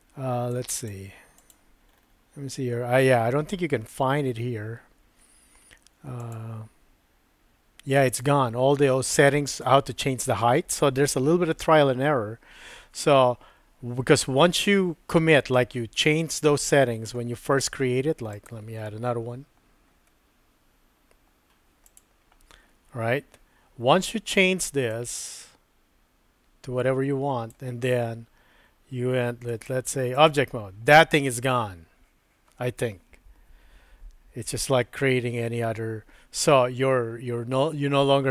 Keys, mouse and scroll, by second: 0.6-1.7 drag, 6.2 click, 8.1 click, 18.3-22.0 drag, 24.9-27.5 drag, 29.5 click.